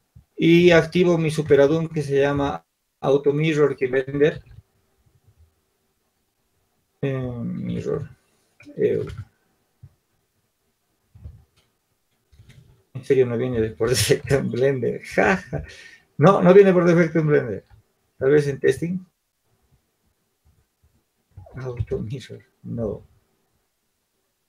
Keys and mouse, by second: 1.8 ctrl+alt+u.